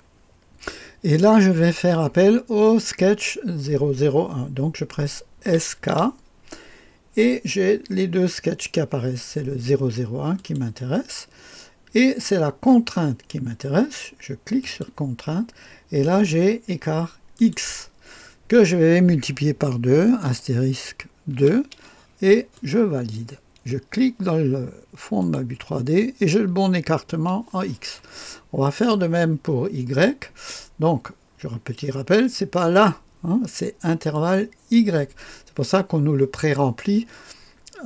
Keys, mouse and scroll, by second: 5.4-5.9 typing, 10.3 click, 14.6 click, 17.3 click, 20.2 KP_Multiply, 21.3 KP_2, 22.5-23.5 drag, 25.2 click, 28.7 click, 30.3-31.5 scroll down 2, 34.1 click.